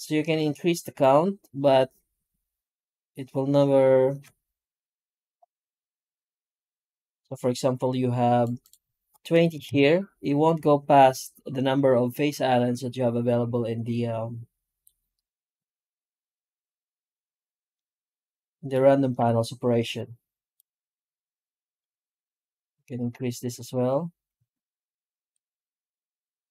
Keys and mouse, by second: 17.6-18.6 middle drag, 19.0 F9.